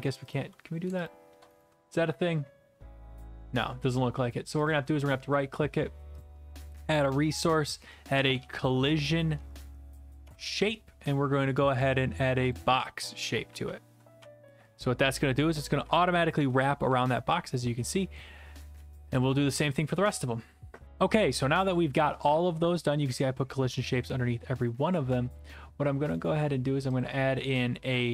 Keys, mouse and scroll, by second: 0.3 click, 1.1 shift+click, 1.6 right click, 4.7 click, 4.9 right click, 6.2 click, 7.9-8.9 typing, 9.4 Down, 9.6 Down, 10.2 Return, 11.9 click, 12.5 click, 13.6-19.2 typing, 19.2 right click, 20.0 click, 25.3 scroll, 25.3-26.3 scroll up 3, 26.3 right click, 27.0 click.